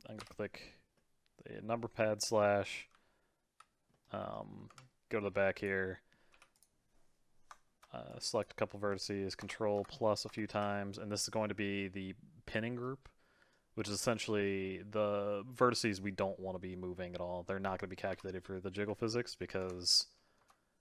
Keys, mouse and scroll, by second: 0.2 KP_Divide, 0.9-2.9 middle drag, 2.9 z, 3.9 middle click, 4.6 Tab, 5.2 middle click, 5.5 click, 5.8 middle click, 6.3 3, 6.5 click, 8.1 click, 9.4 ctrl+KP_Add, 9.7 ctrl+KP_Add, 10.2 ctrl+KP_Add, 11.0-15.8 middle drag, 18.1 KP_Divide, 18.6 middle click, 19.6 ctrl+KP_Enter, 20.3 ctrl+KP_Enter.